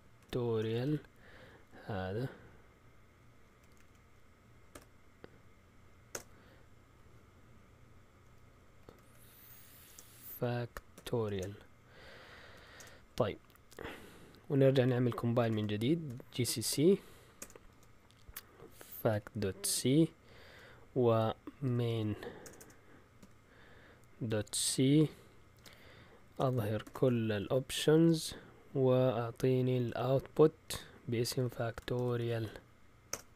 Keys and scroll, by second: 0.0-1.3 typing, 3.5 Left, 3.7 Left, 3.8 Left, 4.7 r, 6.1 Return, 8.2 Up, 8.5 Left, 8.8 Left, 9.0 Left, 9.2 Left, 9.3 Left, 9.8 Left, 9.8 BackSpace, 10.2 Right, 10.9-11.3 typing, 11.3 Return, 12.4-13.2 typing, 15.5 ctrl+l, 15.8-27.9 typing, 29.4-33.3 typing.